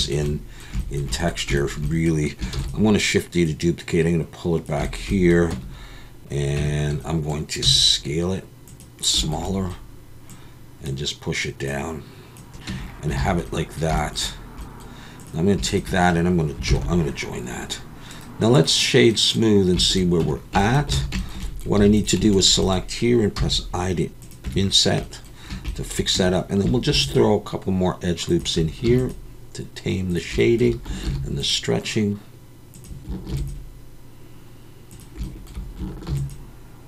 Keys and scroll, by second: 2.5 shift+d, 5.5 Tab, 6.6 Tab, 7.6 s, 12.7 Tab, 13.2 alt+a, 16.7 ctrl+j, 20.2 Tab, 20.9 alt+a, 21.8 3, 23.4 i, 24.4 Tab, 26.1 Tab, 26.9 ctrl+r, 28.8 ctrl+r, 31.0 ctrl+r, 33.3 ctrl+r, 36.1 ctrl+r.